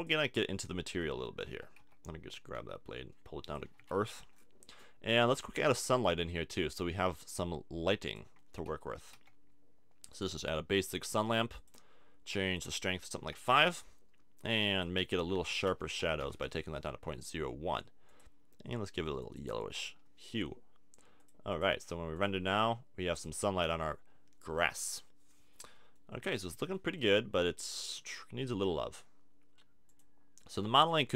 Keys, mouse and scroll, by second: 0.0 click, 0.4 Tab, 0.7 click, 1.8 l, 2.6 g, 3.5 click, 3.6 a, 3.8 Tab, 5.7 shift+a, 9.2 r, 10.1-12.3 drag, 12.5-16.6 drag, 18.1-20.0 drag, 21.2 click, 23.1-28.1 middle drag, 29.9 click.